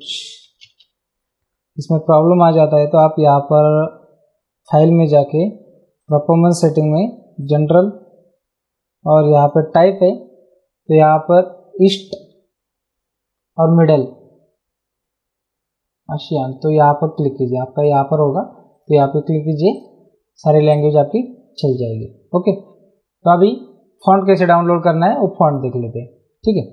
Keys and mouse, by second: 0.2 Escape, 3.7 click, 6.0 click, 7.4 click, 9.4 click, 17.1 click, 20.7 click, 23.4 click, 24.7 click.